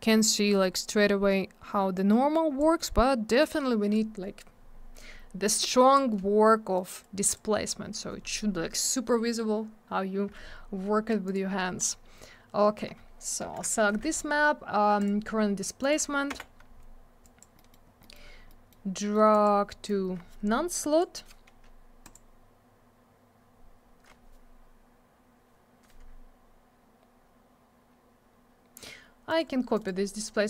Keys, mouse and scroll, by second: 2.0 click, 3.4 click, 5.5 click, 6.8 click, 11.3 click, 11.3 click, 11.8 click, 11.9 click, 13.4 shift+j, 15.0 click, 15.1 click, 15.8 click, 15.9 click, 16.3 m, 17.2 click, 17.4 click, 17.6 middle click, 17.7 double middle click, 17.9 scroll down 1, 18.0 middle click, 18.1 middle click, 18.3 scroll up 1, 18.5 middle click, 19.0 middle click, 19.1 middle click, 19.3 click, 19.4 double click, 19.9 click, 22.0 click, 22.1 click, 29.3 right click, 29.4 right click, 29.7 right click, 29.9 right click.